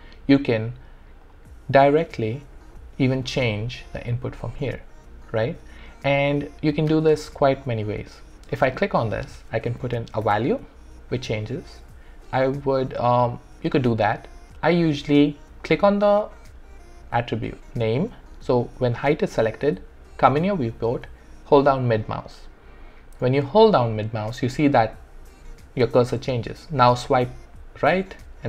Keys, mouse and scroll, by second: 1.2 click, 3.2-5.4 middle drag, 5.4 ctrl+z, 7.6 click, 9.7 5, 10.2 Return, 15.6 click, 18.0 typing, 21.6-28.4 middle drag.